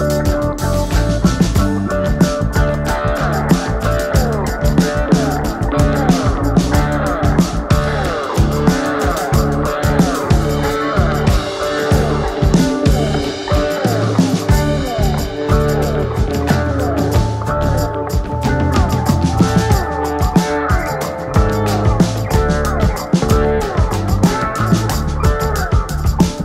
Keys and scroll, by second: 11.3 ctrl+r, 20.4 F3, 20.7 Escape.